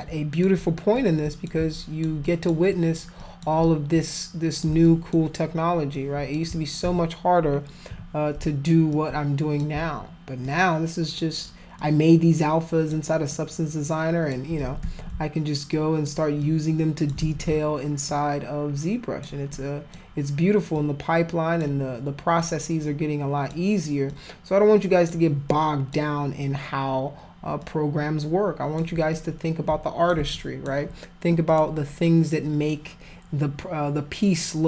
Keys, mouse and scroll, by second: 1.0 shift+click, 1.7 alt+click, 2.2 alt+click, 2.7 alt+click, 3.2 alt+click, 3.6 shift+click, 4.9 alt+click, 5.9 alt+click, 6.8 z, 7.9 f, 8.9 alt+click, 10.4 alt+click, 11.8-12.9 alt+drag, 13.3-14.3 alt+drag, 14.8 ctrl+z, 15.7 alt+click, 16.4 alt+click, 17.2 ctrl+z, 18.1-19.2 alt+drag, 19.5 alt+click, 20.8 alt+click, 22.4-23.5 alt+drag, 24.1 alt+click, 25.5 alt+click, 27.6-28.8 alt+drag, 29.1 click, 30.3 alt+click, 31.5 click.